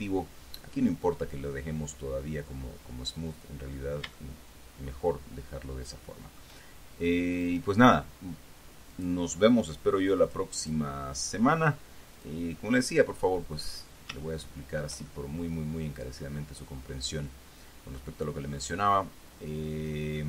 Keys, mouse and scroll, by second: 0.0 scroll up 1, 0.7 scroll down 1, 3.3 scroll down 1, 3.9-4.2 scroll down 1, 4.5-6.9 shift+middle drag, 7.8 right click, 9.3 click, 10.6 click, 10.9 click, 12.5 click, 13.4 scroll down 2, 13.9-14.4 scroll up 2, 14.7 shift+middle click, 15.4-18.9 shift+middle drag, 18.9 scroll up 2, 19.1 scroll down 2, 20.0-20.2 middle drag.